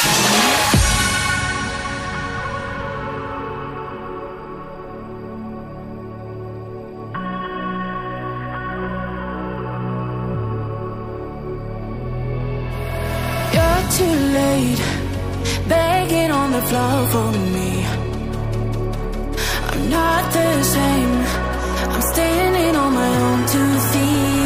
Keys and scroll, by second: 11.6 ctrl+a, 14.3 ctrl+a, 15.3 ctrl+d.